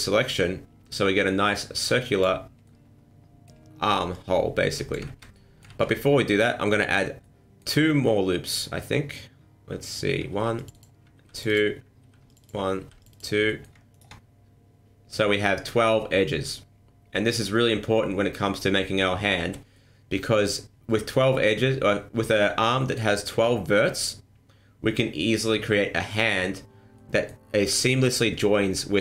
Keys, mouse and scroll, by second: 1.8 click, 2.6 middle click, 4.1 click, 5.0 ctrl+z, 5.3 middle click, 5.6 ctrl+z, 6.0 middle click, 6.6 middle click, 7.2 middle click, 8.0 middle click, 10.3 ctrl+r, 11.2 ctrl+r, 12.0 ctrl+r, 12.8 ctrl+r, 13.4 middle click, 13.9 alt+right click, 19.7 middle click, 22.8 middle click, 26.9 middle click.